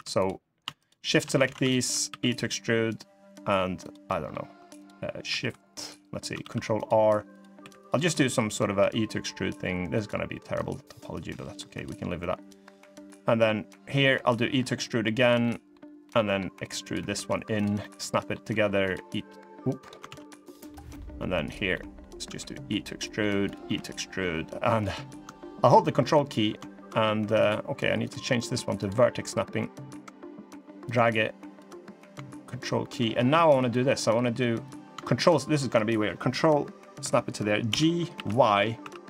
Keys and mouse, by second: 1.2 ctrl+z, 1.5 shift+click, 1.8 e, 3.8 middle click, 6.1 ctrl+r, 7.3 3, 7.6 click, 7.8 middle click, 8.5 e, 10.3-11.6 drag, 12.2 click, 12.8 middle click, 14.0 e, 15.2 middle click, 15.8 middle click, 16.5 click, 16.9 e, 17.5 middle click, 18.6 click, 18.9 e, 19.8 ctrl+z, 20.4 middle click, 21.2 click, 21.4 middle click, 22.0 e, 23.1 click, 23.4 e, 27.8-29.8 drag, 30.6 ctrl+click, 31.8 ctrl+click, 33.3 shift+click, 34.4 click, 37.4 g.